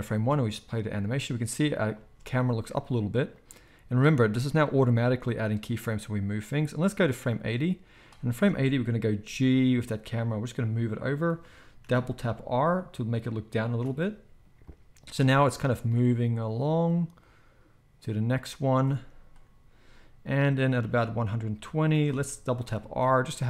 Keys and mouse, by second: 0.1 space, 1.9 space, 8.3-9.1 middle drag, 9.1-11.3 drag, 9.1 g, 11.3-12.3 right drag, 11.8 r, 12.3-13.8 shift+middle drag, 13.8-14.6 right drag, 14.6-15.1 drag, 15.1 space, 18.8 space, 22.5 r.